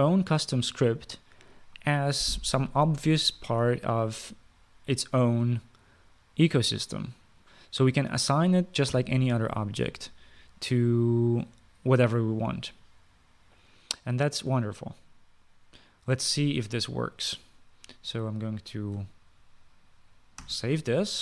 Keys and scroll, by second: 9.6 ;, 21.1 ctrl+s.